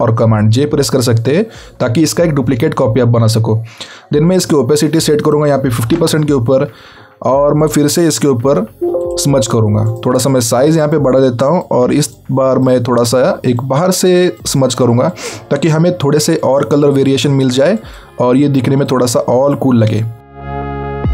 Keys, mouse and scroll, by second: 7.0 click, 8.2-8.8 alt+scroll up 1, 8.8-9.1 scroll up 1, 9.1 right click, 10.0 click.